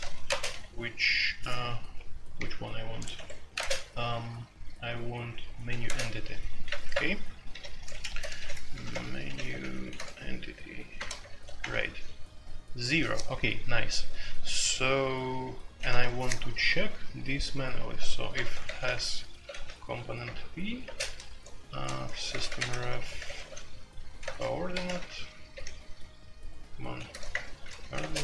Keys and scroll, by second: 0.0-0.5 typing, 3.1 Escape, 3.5 space, 3.6 Tab, 5.7 space, 5.8 Tab, 6.8 alt+2, 7.5-11.7 typing, 16.0 typing, 18.3-19.6 typing, 20.2 Return, 20.8 typing, 21.9-25.5 typing, 26.8-28.2 typing.